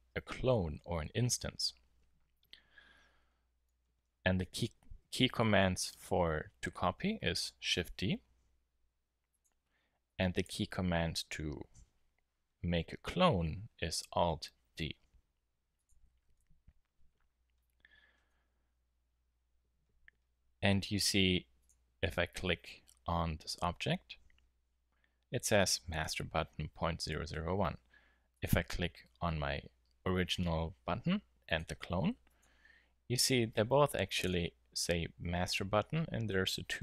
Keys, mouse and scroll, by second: 5.4 KP_7, 7.6 shift+d, 9.4-12.1 drag, 14.5 alt+d, 15.8-17.1 middle drag, 28.3-30.1 drag, 31.4-34.6 drag.